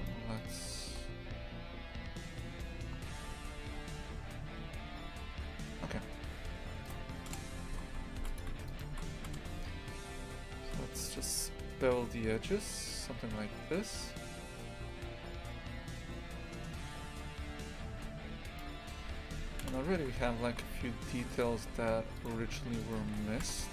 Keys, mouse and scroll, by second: 7.3 KP_0, 7.7 shift+f, 8.7 shift+right click, 9.3 KP_0, 10.6 ctrl+b, 19.0 3, 19.6 KP_0, 20.0 shift+f, 22.2 right click, 22.8 shift+right click, 23.4 KP_0.